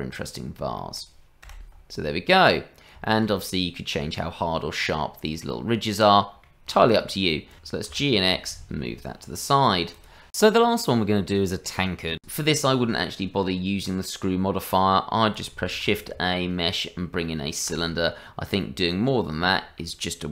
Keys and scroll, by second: 8.8 g, 15.7 shift+a.